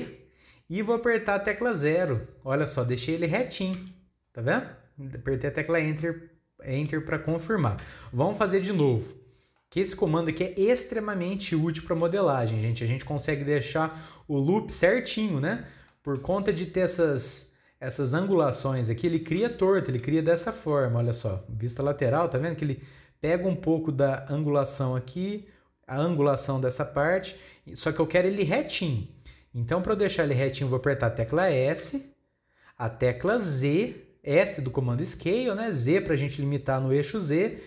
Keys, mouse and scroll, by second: 5.4-6.0 scroll down 2, 6.0-14.7 middle drag, 15.9-18.9 middle drag, 19.6-20.7 middle drag, 20.7 KP_3, 21.5-24.4 scroll up 1, 29.4-31.8 scroll up 1, 31.8 s.